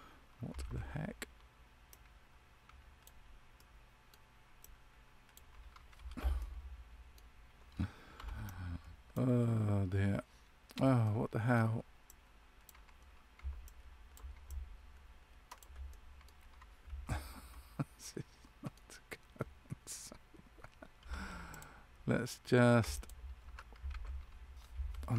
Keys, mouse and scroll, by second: 6.3 middle click, 8.1 c, 17.0 middle click.